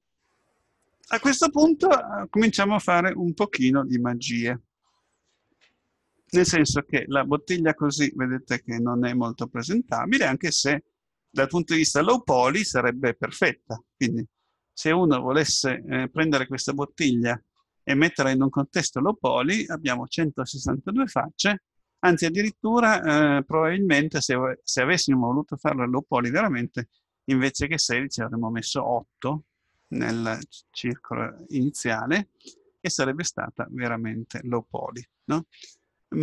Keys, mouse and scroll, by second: 7.3 Tab, 8.1-9.9 middle drag, 17.3-23.7 middle drag.